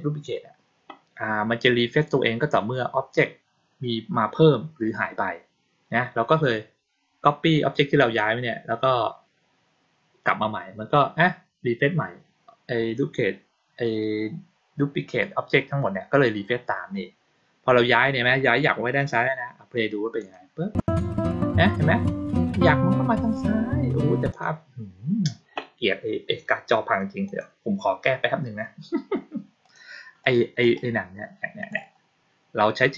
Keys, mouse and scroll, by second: 20.0 click, 24.2 click, 27.1 click, 29.5 click, 30.1 click, 30.5 right click, 31.5 click.